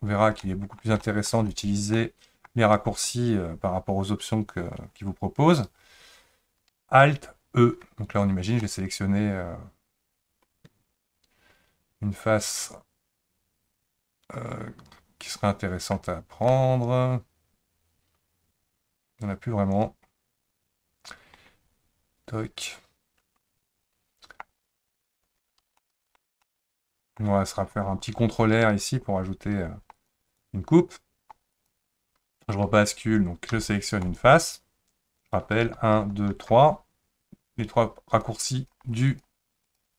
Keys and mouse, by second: 0.4 middle click, 1.0 shift+middle click, 1.5 click, 1.9 middle click, 8.7-16.1 middle drag, 16.5-24.4 middle drag, 25.8 shift+middle click, 26.4 middle click, 28.5 ctrl+r, 31.6 click, 33.5 3, 34.1-35.6 drag, 35.6 1, 36.0 2, 36.3 3, 39.6 click.